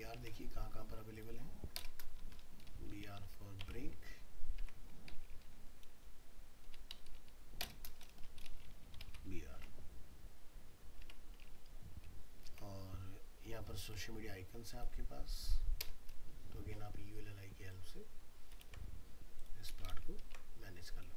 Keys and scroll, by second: 3.6 alt+Tab, 9.6 alt+Tab, 18.6 ctrl+c, 19.9 ctrl+v, 20.2 ctrl+s.